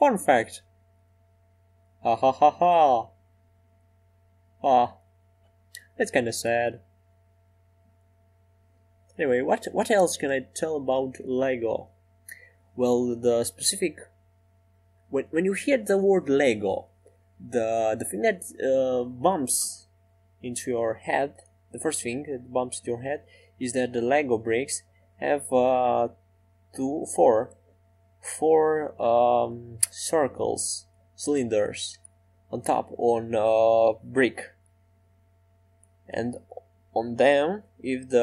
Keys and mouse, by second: 2.8-4.6 drag, 5.6-7.2 drag, 5.6 e, 8.4 e, 8.8 s, 11.3-17.9 drag, 15.0-17.9 right drag, 20.6 e, 26.8-32.8 middle drag, 35.4-37.8 drag, 35.4 right click, 37.8-38.2 middle drag.